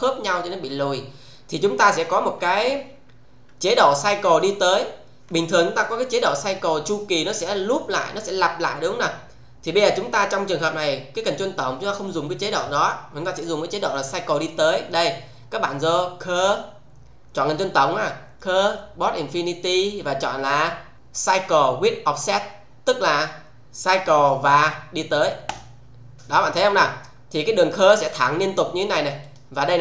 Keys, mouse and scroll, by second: 16.4 click, 25.4 click, 27.1-27.6 scroll down 1, 27.7-28.4 alt+middle click, 28.4-28.8 scroll down 1, 29.2 click.